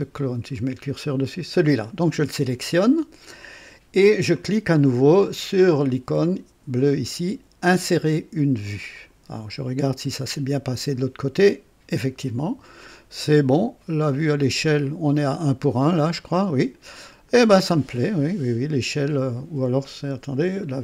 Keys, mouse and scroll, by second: 8.9 click, 10.7 click, 14.0-15.2 drag, 16.0-17.5 middle drag.